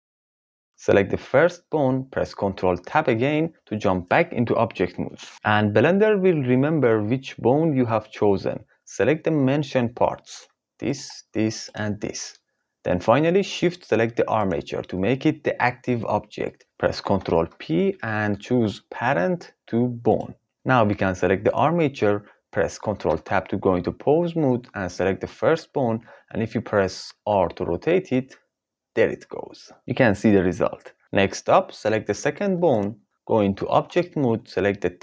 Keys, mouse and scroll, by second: 2.9 ctrl+Tab, 10.9 shift+click, 11.7 shift+click, 17.3 ctrl+p, 23.0 ctrl+Tab, 27.1 r, 31.0 ctrl+z, 32.6 click, 33.7 ctrl+Tab.